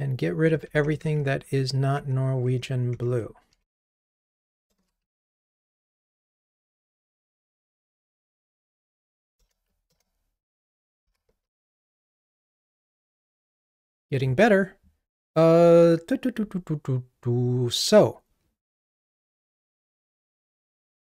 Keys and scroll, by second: 0.9 super+BackSpace, 5.9 ctrl+r, 9.4 alt+Return, 11.1 ctrl+r.